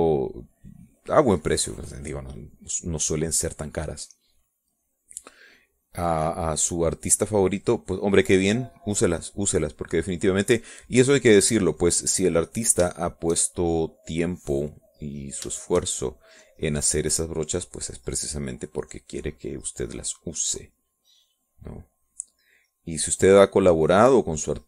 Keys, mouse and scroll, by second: 3.0 middle click, 4.0 middle click, 4.5 middle click, 5.9-9.3 drag, 9.8-11.6 drag, 11.8 middle click, 12.6 click, 13.6 click, 14.7-15.9 shift+drag, 16.0 shift+click, 16.8-17.9 shift+drag, 18.0-24.6 shift+drag.